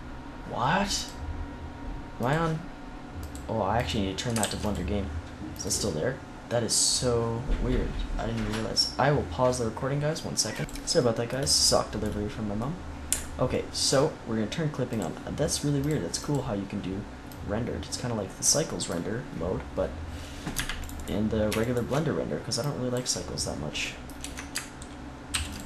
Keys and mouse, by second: 0.9 click, 2.2-4.9 drag, 4.3 ctrl+s, 5.4-6.7 drag, 10.9-12.6 middle drag, 15.2-16.3 drag, 18.6-20.7 drag, 18.6-22.5 right drag, 22.6 click, 23.4 click, 24.1 Tab, 25.2 ctrl+s.